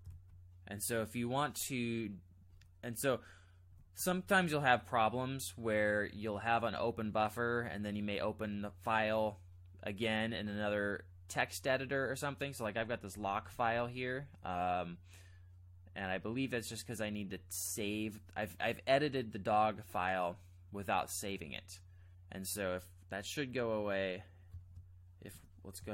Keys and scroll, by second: 0.1 alt+Tab, 2.5 alt+Left, 3.0 alt+Right, 3.7 alt+Left, 13.1 k, 13.3 k, 13.5 k, 13.9 k, 25.3 space, 25.8 b.